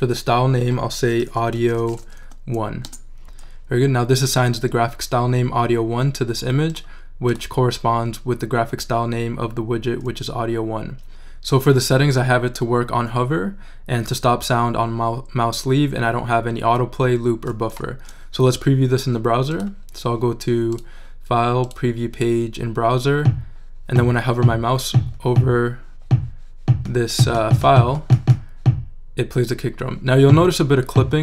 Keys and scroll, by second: 1.3-2.7 typing, 2.8 Return.